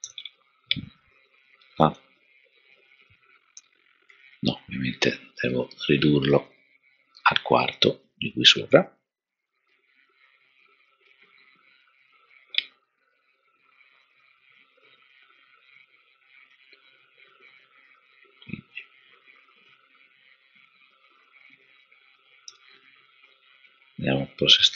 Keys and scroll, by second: 0.0 super+-, 4.1 super+z, 22.4 super+-.